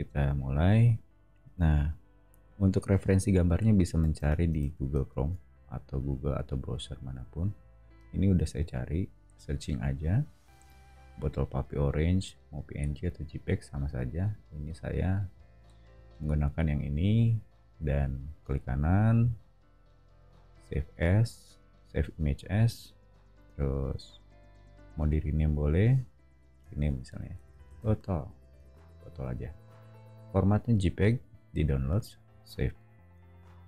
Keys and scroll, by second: 4.0 super+Tab, 4.6 super+Tab, 27.1-28.9 typing.